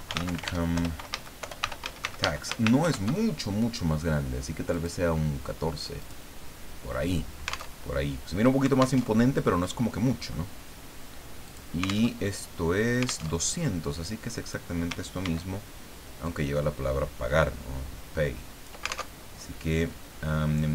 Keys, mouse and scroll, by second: 0.1 alt+n, 0.2 alt+o, 0.3 alt+m, 0.4 alt+e, 0.7 alt+Return, 1.1 alt+a, 1.4 alt+BackSpace, 1.6 alt+t, 1.8 alt+a, 2.0 alt+x, 2.2 alt+Caps_Lock, 2.8 ctrl+shift+Home, 4.7 click, 6.0 click, 7.7 alt+Tab, 9.0 alt+Tab, 11.4 click, 12.1 alt+Tab, 13.3 alt+Tab, 13.8 click, 15.2 ctrl+d, 16.2-19.1 ctrl+drag, 19.2 ctrl+alt+Tab.